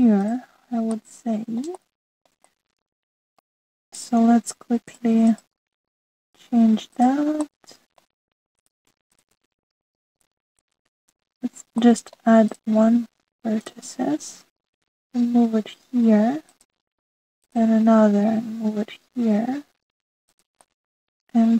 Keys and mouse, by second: 1.9-2.5 middle drag, 2.8-3.3 shift+drag, 3.5-4.6 middle drag, 5.9 click, 7.9 click, 8.4 middle click, 9.5 click, 10.0 shift+click, 12.7 middle click, 15.6 g, 18.3 click, 19.3 g.